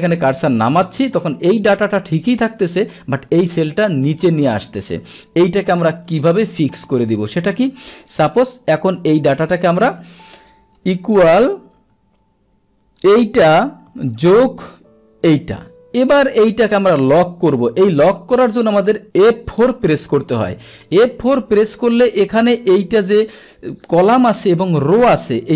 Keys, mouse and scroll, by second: 1.3 Down, 2.8 Down, 4.1 Up, 8.2 click, 8.3 click, 9.9 click, 10.9 Delete, 13.0 click, 15.3 click, 19.3 F4.